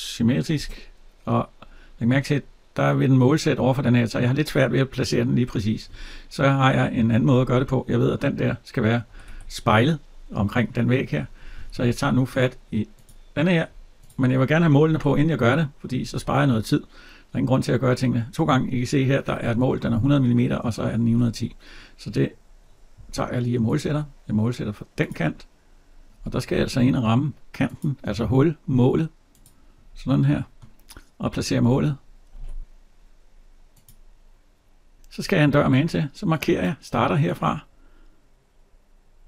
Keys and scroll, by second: 8.9 Escape, 14.7 alt+Tab, 20.9 alt+Tab, 31.4 alt+Tab.